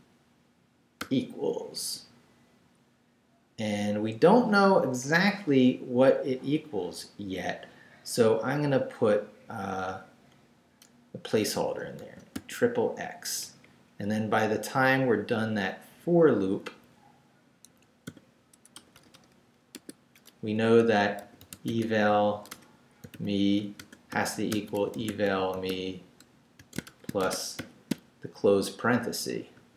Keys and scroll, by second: 1.0 =, 1.7 ', 9.3 Left, 11.5 x, 13.4 Down, 14.1 Left, 16.6 Left, 17.7 Escape, 18.0 o, 18.7 BackSpace, 19.7 Tab, 21.0-27.6 typing, 29.6 shift+0.